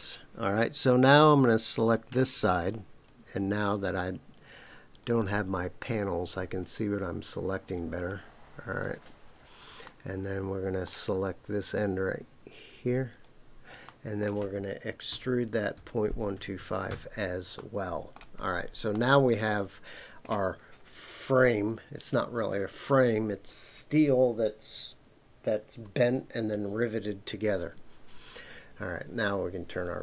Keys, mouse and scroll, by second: 1.8 click, 2.7 shift+click, 3.5 shift+click, 4.3 shift+click, 5.0 shift+click, 5.3-6.6 shift+drag, 7.7-9.0 shift+drag, 9.8-10.9 middle drag, 13.1 shift+click, 13.8 middle click, 15.1-16.6 typing, 16.9 KP_Enter, 17.5 middle click, 18.4 scroll down 2, 18.9-20.4 middle drag.